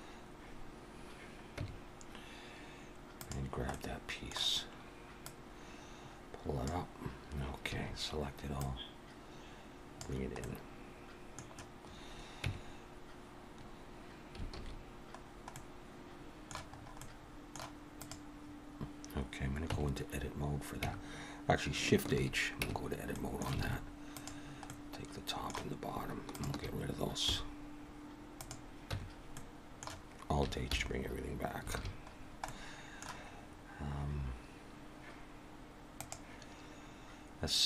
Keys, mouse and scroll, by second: 1.6 Tab, 3.1 click, 3.7 middle click, 5.2 click, 7.7 a, 8.6 click, 10.4 middle click, 12.4 Tab, 14.5 alt+a, 15.2 scroll down 1, 15.5 middle click, 16.8 scroll up 2, 17.0 middle click, 18.0 click, 19.7 Tab, 20.8 Tab, 22.1 shift+h, 22.6 Tab, 23.1 middle click, 23.6 alt+a, 24.1 click, 24.7 middle click, 26.3 shift+click, 27.3 x, 28.9 Tab, 29.3 middle click, 30.7 alt+h, 31.7 alt+a, 32.1-32.9 scroll down 3, 32.4 middle click.